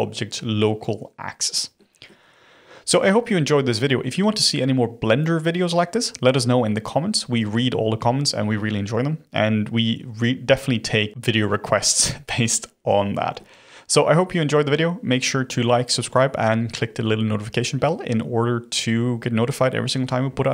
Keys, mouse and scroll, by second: 1.4-1.7 scroll up 1, 1.7-2.5 middle drag, 2.5-4.6 scroll down 1, 4.6-5.5 scroll down 1, 13.1-16.2 middle drag.